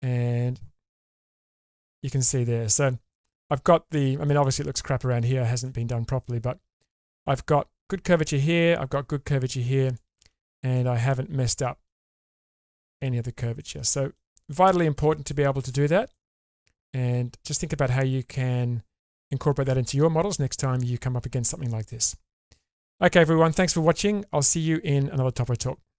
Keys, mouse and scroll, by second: 1.2 /, 2.3 middle click, 3.0 scroll up 1, 4.0 middle click, 5.6 middle click, 8.3 middle click, 9.8 click, 10.2 Tab, 10.8-11.8 middle drag, 12.2 middle click, 12.4 shift+middle click, 12.8 middle click, 13.6 shift+middle click, 16.1-20.8 middle drag, 21.9 middle click.